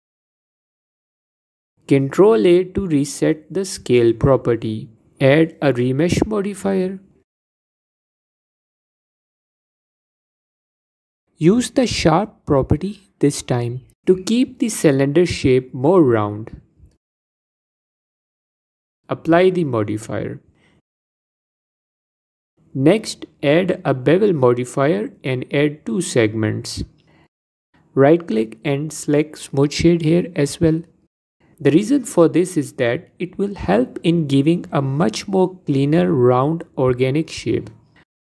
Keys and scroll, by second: 2.0 ctrl+a, 10.6 F4, 11.3 F4, 15.0 F4, 25.0 F4.